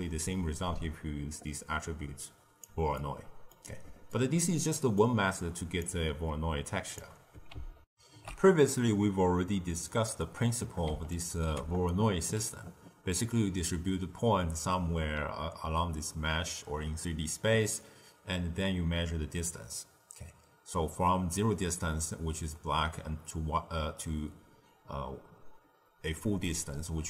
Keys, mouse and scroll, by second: 2.9-5.8 ctrl+middle drag, 5.8 click, 7.8 ctrl+alt+shift+w, 9.1 ctrl+alt+shift+q, 11.1 ctrl+shift+click, 26.9 d.